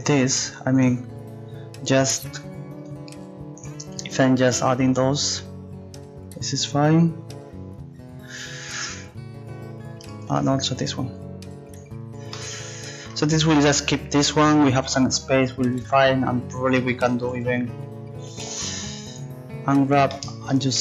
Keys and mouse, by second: 2.9-9.0 drag, 3.6-9.0 right drag, 10.4-12.3 right drag, 11.8 click, 17.3 a, 17.5 a.